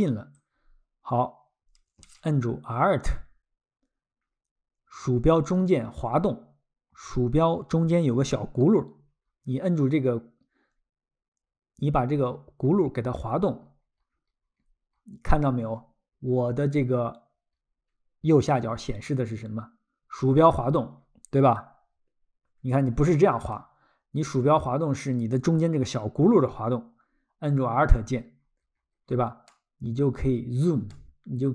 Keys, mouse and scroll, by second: 0.3 ctrl+click, 6.1-6.5 alt+scroll, 23.9-25.0 alt+scroll, 29.5 alt+middle click, 30.9 alt+middle click.